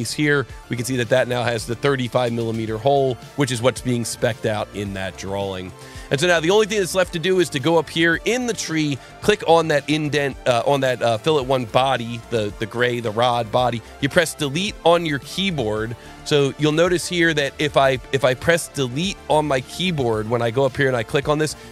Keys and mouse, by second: 0.1 alt+click, 0.2 alt+1, 1.2 click, 2.1 ctrl+shift+click, 5.0 alt+1, 6.7 click, 8.1 click, 9.7 click, 10.8 click, 16.9 click.